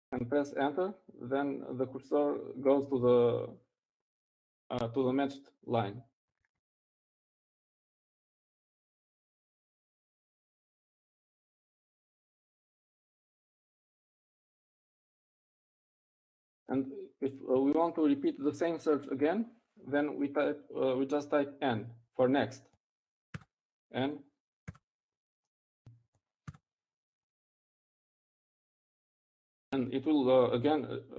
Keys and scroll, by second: 27.1 typing, 29.6 typing.